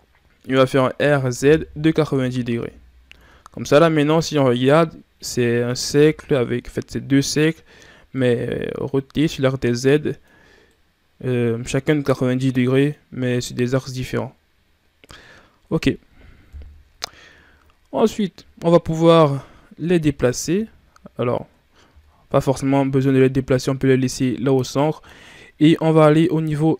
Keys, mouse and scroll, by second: 0.8 r, 3.0 Tab, 3.5 scroll down 1, 3.7-13.6 middle drag, 16.4 KP_1, 18.4 shift+scroll up 2, 19.7 Tab, 20.4 a, 21.7 Tab, 25.0 ctrl+scroll up 2.